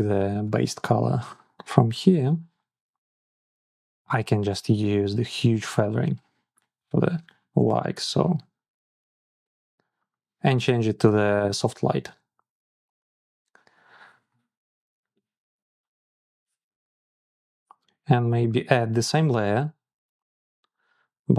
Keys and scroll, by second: 0.3 ctrl+c.